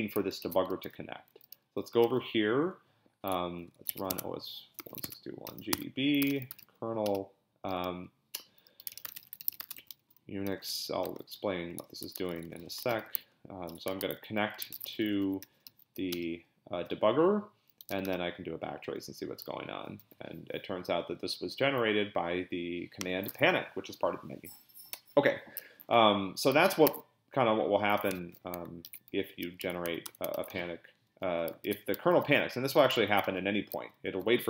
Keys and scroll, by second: 0.4 ctrl+b, 0.8-7.1 typing, 8.5-16.3 typing, 17.6-18.4 typing, 26.9 ctrl+a, 28.1 Escape, 28.8 ctrl+x, 29.1 n, 29.6 BackSpace, 30.0 BackSpace, 30.4 ctrl+b, 30.5 n, 31.6 ctrl+b, 32.2 p, 33.1 ctrl+b, 33.2 n.